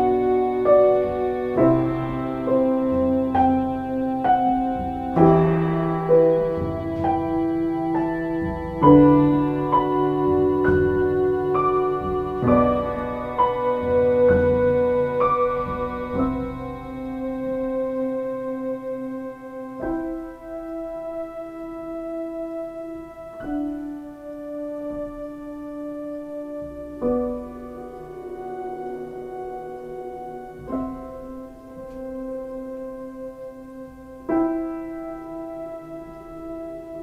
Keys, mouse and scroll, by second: 11.1 ctrl+t, 18.1 ctrl+space, 28.3 ctrl+space, 29.9 space.